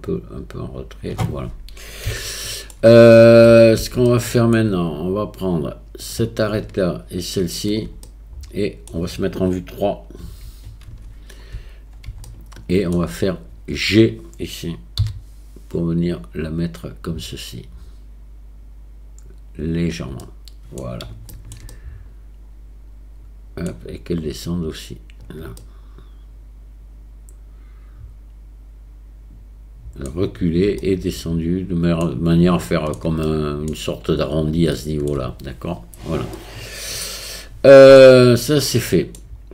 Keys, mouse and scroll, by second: 0.1-1.1 drag, 2.3 shift+middle click, 3.5 middle click, 4.1 shift+middle click, 7.4 shift+middle click, 8.1 middle click, 10.3 KP_3, 12.3 shift+middle click, 15.0 g, 20.2 middle click, 21.3 shift+middle click, 21.7-23.7 middle drag, 24.5 click, 25.6-30.1 middle drag, 30.8-32.0 middle drag, 32.7 shift+middle click, 33.3 middle click, 34.7 shift+middle click, 36.4-37.7 middle drag, 37.8 middle click, 38.7 middle click.